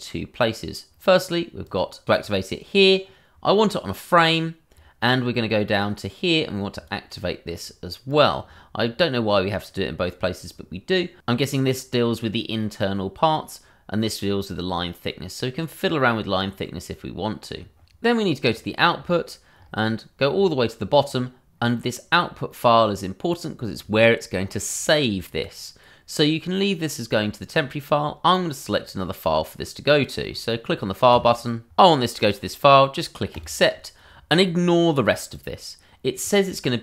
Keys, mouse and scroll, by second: 1.6 click, 3.3-5.2 scroll, 6.7 click, 7.2 scroll, 8.1 click, 8.4-9.2 scroll, 18.4 click.